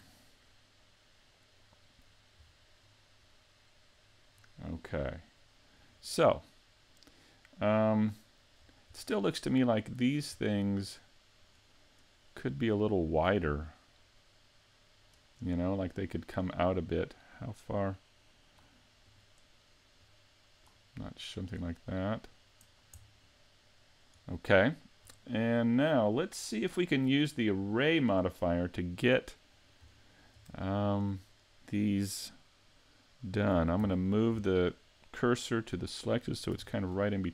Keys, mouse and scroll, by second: 0.5 middle click, 2.5-2.8 scroll down 3, 2.9 scroll up 1, 3.4 middle click, 4.4-4.9 scroll up 1, 4.9-5.7 scroll down 1, 5.8 scroll up 1, 6.3 middle click, 8.6-9.0 scroll up 2, 9.0 middle click, 11.4 right click, 12.3 middle click, 13.5-14.6 scroll down 1, 14.6 scroll down 1, 15.7 middle click, 17.3 click, 19.1 right click, 20.0 click, 21.3 middle click, 23.1 middle click, 24.3 scroll up 2, 24.7 shift+middle click, 25.8 middle click, 30.0 shift+middle click, 30.9 shift+right click, 33.8 shift+s, 36.6 a, 37.0 scroll up 3.